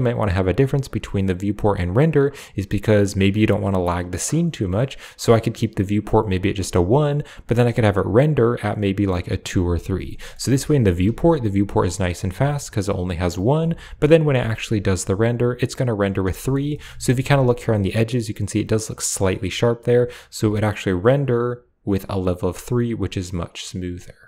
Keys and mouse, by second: 2.3 click, 3.3 click, 4.4 click, 5.1 click, 9.2 click, 10.0 middle click, 10.3 Tab, 10.9 g, 11.7 click, 13.4 Tab, 14.1 Tab, 16.2 shift+middle click, 16.6 middle click, 16.8 shift+middle drag, 17.6 middle click, 20.8 click, 21.3 click, 23.6 click, 23.9 click.